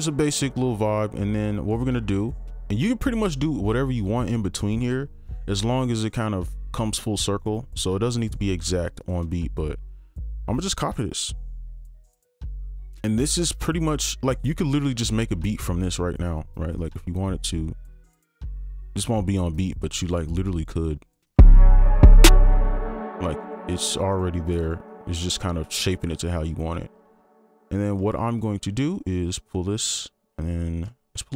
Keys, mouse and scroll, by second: 0.7 ctrl+click, 2.2 shift+click, 3.8 double click, 7.4 right click, 10.9 shift+click, 14.1 right click, 20.0 double click, 22.7 space, 23.0 right click, 26.7 scroll down 1, 27.0 ctrl+2, 28.9 shift+click, 31.2 ctrl+Up.